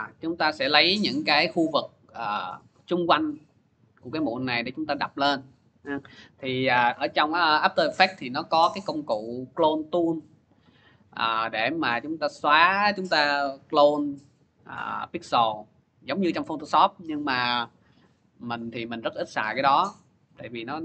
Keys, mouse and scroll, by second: 1.8 scroll, 3.0 middle click, 20.6 click.